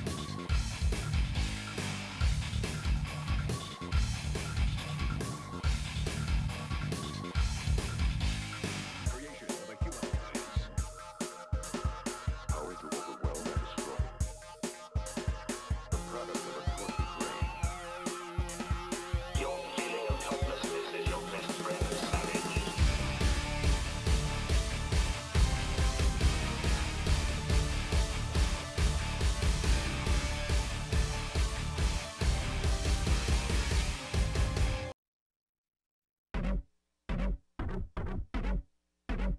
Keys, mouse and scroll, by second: 0.4 click, 1.0 s, 2.0 middle click, 2.2 scroll down 2, 2.4 shift+middle click, 3.1 click, 4.0 shift+click, 4.4 shift+middle click, 5.3-6.3 shift+drag, 6.3 KP_7, 6.6 scroll up 4, 6.8 shift+middle click, 7.0 shift+middle click, 7.5 z, 8.2 g, 9.2 click, 9.8 s, 10.9 middle click, 11.5 scroll down 10, 11.7 middle click, 11.9 click, 12.1 middle click, 12.7 scroll down 1, 12.8 shift+middle click, 13.1 3, 13.4-15.2 drag, 15.2 e, 16.5-18.0 drag, 18.0 middle click, 19.0 scroll down 3, 19.2-20.4 middle drag, 20.4 KP_1, 20.5 KP_2, 20.9 KP_1, 21.2 middle click, 21.5 scroll down 1, 21.6 middle click, 22.2 click, 22.4 scroll up 5, 22.6-23.1 scroll down 1, 23.3 click, 24.9 shift+middle click, 25.2 click, 26.1 g, 26.8 click, 27.6 g, 30.6 click, 31.3 g, 32.0 click, 32.5 g, 33.4 click, 33.8 g, 35.5 KP_3, 36.0 KP_1, 36.6 KP_3, 37.3 middle click, 37.5 scroll down 4, 37.7 middle click, 38.4 click, 39.1 scroll up 1.